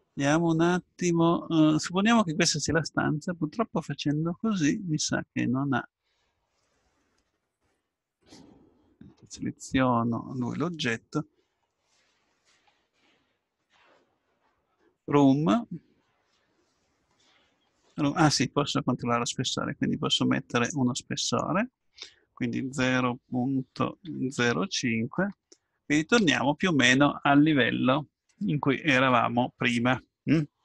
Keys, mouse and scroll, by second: 9.4 middle click, 19.4-21.1 drag, 21.2-23.2 drag.